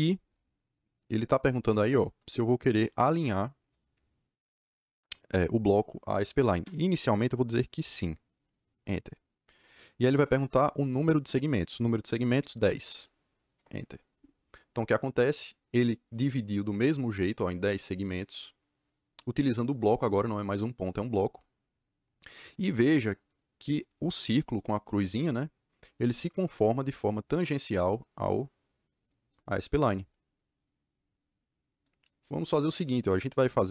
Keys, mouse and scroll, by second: 8.6 KP_Enter, 12.7 KP_1, 12.7 KP_0, 13.5 KP_Enter.